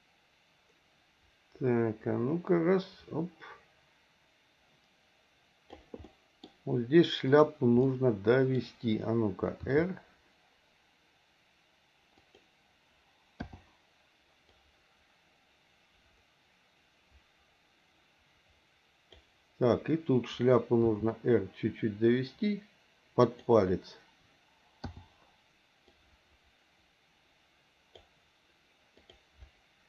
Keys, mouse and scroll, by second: 6.1 middle click, 7.3 click, 7.9 middle click, 9.6 r, 13.4 i, 14.6-19.2 drag, 20.8 r, 24.9 i, 25.9-28.1 drag, 29.0 click.